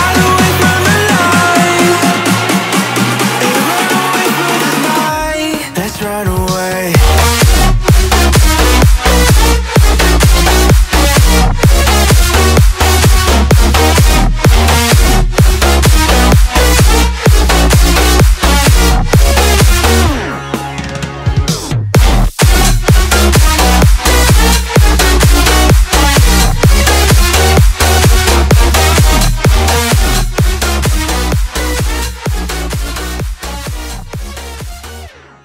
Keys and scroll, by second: 4.0 Return, 13.3 space, 25.8 space.